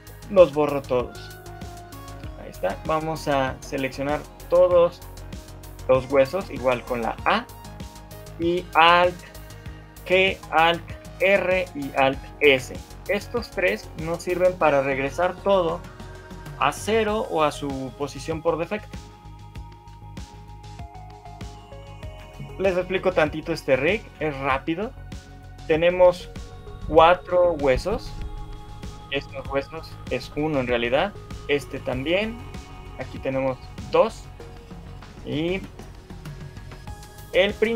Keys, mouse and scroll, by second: 0.0 Delete, 2.6 shift+middle click, 3.6 click, 4.6 a, 4.8 a, 7.4 shift+middle click, 10.0 alt+g, 11.0 alt+r, 12.4 alt+s, 20.2 shift+middle click, 20.5 middle click, 21.4 middle click, 22.0 shift+middle click, 23.2 middle click, 24.0 shift+middle click, 28.4 click, 31.2 click, 32.6 click, 33.8 shift+click, 34.6 middle click, 35.8 middle click.